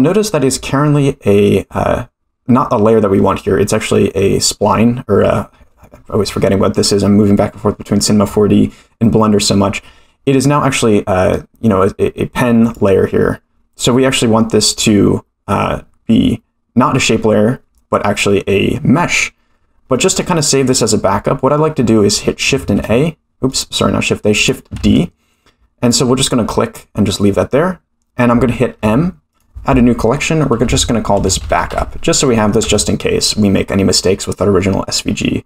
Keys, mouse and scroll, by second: 12.6 click, 14.7 click, 19.9-20.2 middle drag, 22.5 shift+a, 24.3 click, 24.8 shift+d, 28.7 m, 32.6 Return.